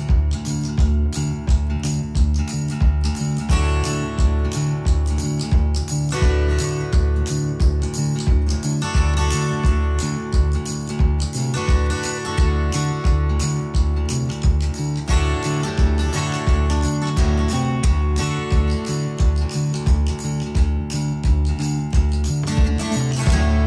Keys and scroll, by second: 0.7 Escape, 8.1 Delete, 9.3 Escape, 9.5 Escape, 9.6 Escape, 22.8 ctrl+s.